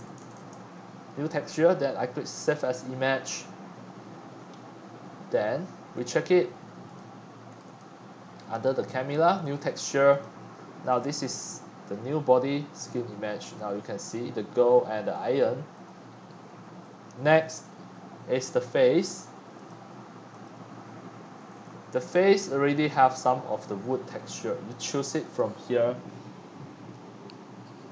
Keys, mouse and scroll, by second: 0.0-0.5 typing, 1.8-2.5 typing, 2.5-6.5 drag, 6.8 click, 7.5 click, 7.6 click, 8.4 click, 9.5 click, 10.1 drag, 10.3 click, 10.8 click, 10.9 click, 12.9-13.4 scroll down 9, 13.4-14.5 scroll up 22, 14.7-15.3 scroll down 7, 15.9-17.9 drag, 19.6 click, 20.4 click, 20.8-22.1 drag, 22.1 shift+middle click, 22.3-22.9 scroll up 5, 22.6 middle click, 25.2 scroll, 25.3-27.9 drag.